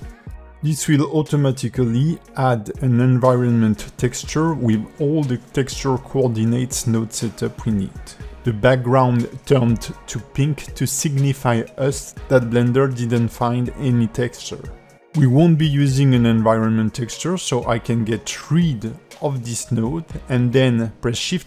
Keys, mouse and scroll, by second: 0.2 g, 1.5 click, 16.4 x, 17.1 click, 18.3 shift+a.